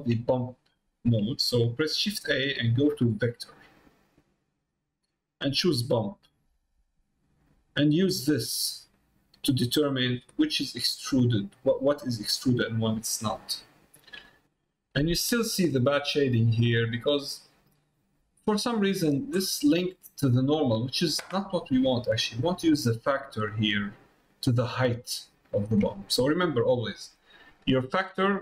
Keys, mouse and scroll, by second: 12.3 middle click, 13.1-14.2 middle drag, 14.5 middle click, 15.7-17.1 middle drag, 17.5 middle click, 17.9 middle click, 18.8 middle click, 19.6 middle click, 20.7 middle click, 22.4-25.8 drag.